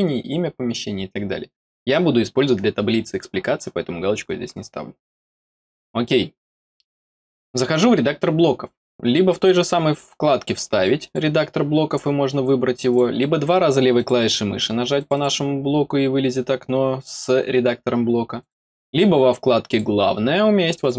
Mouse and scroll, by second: 5.6 click, 11.0 click, 12.8 click, 13.9 click, 14.9 click, 18.3 click, 19.6 click, 20.7 click.